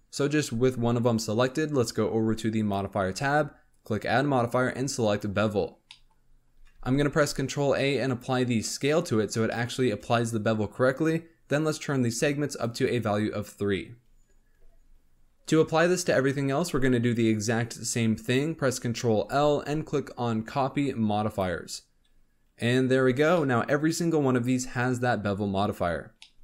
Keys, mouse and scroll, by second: 2.5 click, 3.7 click, 5.1-5.8 drag, 5.8 middle drag, 6.1-6.5 scroll up 3, 6.7 ctrl+a, 9.4-12.4 shift+middle drag, 12.4-13.9 drag, 13.9-14.3 scroll down 6, 19.1 ctrl+l, 22.0 scroll up 3, 23.0 alt+a, 23.3-23.9 middle drag, 23.9-24.4 scroll up 1, 24.5-25.3 scroll up 1, 25.3-26.1 scroll down 6, 26.1 middle click.